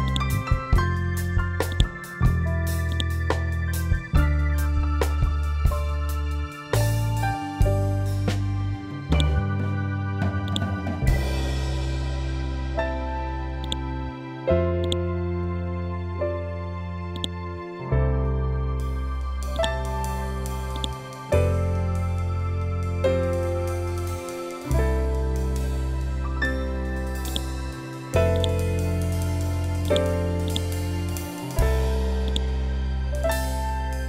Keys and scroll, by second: 3.8 2, 4.0 5, 4.6 7, 5.0 5, 6.2 BackSpace, 7.0 7, 7.3 2, 7.6 Return, 12.7 e, 15.1 Right, 17.5 c, 26.3 ctrl+g, 27.8 e, 31.2 Up.